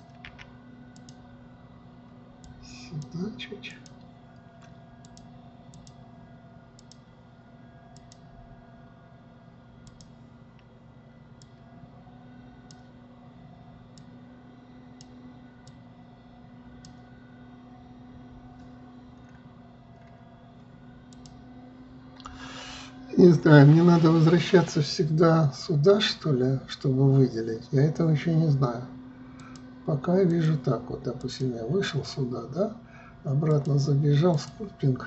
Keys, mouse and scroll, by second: 0.0 click, 0.8 f, 3.0-7.5 drag, 8.5-11.6 drag, 12.0-19.3 drag, 19.7 scroll down 4, 20.5-21.7 scroll up 4, 21.7-24.7 drag, 29.9-32.0 drag, 34.1-35.0 drag.